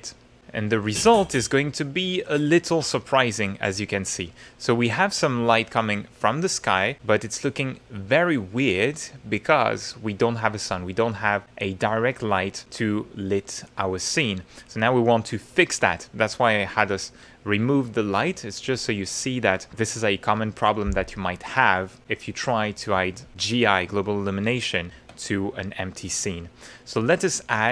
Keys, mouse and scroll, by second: 0.4-1.6 middle drag, 2.0 middle click, 2.6 click, 3.4 middle click, 3.7-5.3 drag, 11.6 click, 15.8 click, 24.9 ctrl+a.